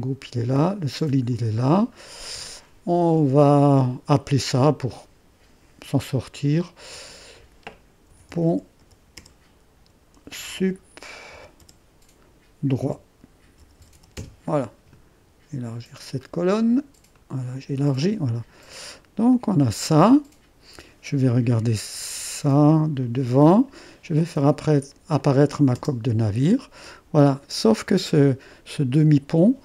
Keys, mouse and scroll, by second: 0.9 click, 1.7-2.3 scroll down 1, 2.4-5.5 drag, 7.1 F2, 7.9-11.6 typing, 12.9-14.5 typing, 17.2-18.3 drag, 18.8 click, 19.4-21.8 drag, 21.8-22.5 typing, 23.1 click, 25.2 click, 25.8 space, 27.5-28.2 typing.